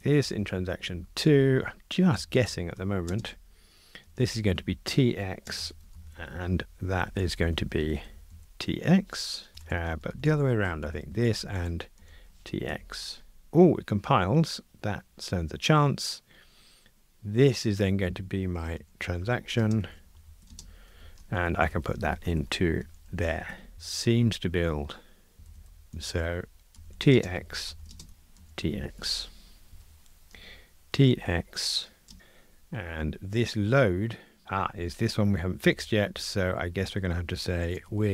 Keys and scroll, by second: 0.8 Escape, 7.8 alt+shift+Left, 8.9 Escape, 10.8 Escape, 11.4 alt+shift+Right, 12.7 Escape, 22.1 alt+shift+Left, 23.5 Escape, 23.7 super+F9, 28.1 alt+shift+Left, 29.0 Escape, 29.7 super+F9, 34.4 super+b, 35.6 super+b.